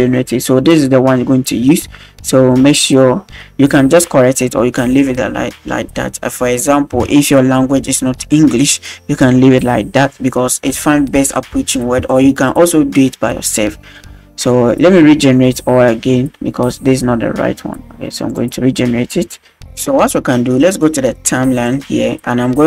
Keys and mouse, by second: 18.3 click, 21.6 click.